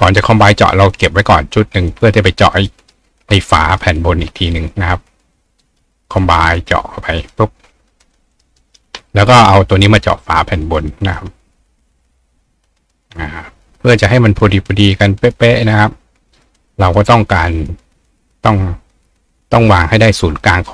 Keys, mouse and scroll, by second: 0.0 click, 0.5 click, 1.1-2.9 ctrl+drag, 2.6 ctrl+right click, 3.7 click, 4.6 shift+click, 6.4 click, 7.2 click, 8.0 click, 8.3 right click, 9.8 click, 10.4 click, 10.9-16.6 ctrl+drag.